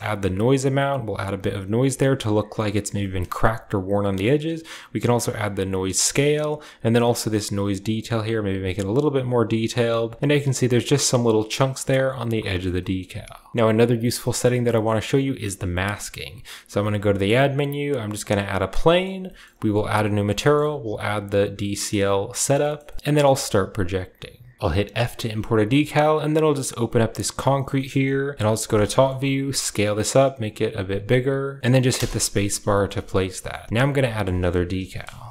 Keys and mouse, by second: 2.8 shift+middle click, 4.2-5.9 drag, 6.5-8.4 drag, 9.2 click, 10.1 shift+click, 12.7 shift+middle drag, 13.5 ctrl+s, 14.1 shift+middle click, 14.6 shift+middle click, 15.6 shift+middle drag, 16.6 shift+a, 18.7 middle click, 19.2 shift+middle click, 19.8 drag, 21.7 click, 22.5 middle click, 22.7 shift+middle click, 26.7-35.3 middle drag, 28.3 KP_7.